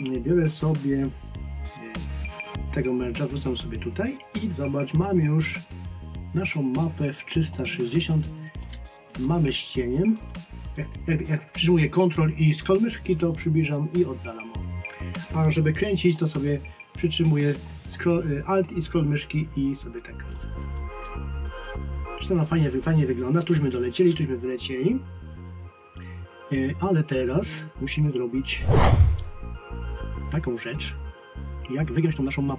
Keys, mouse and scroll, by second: 2.0 click, 30.7 click.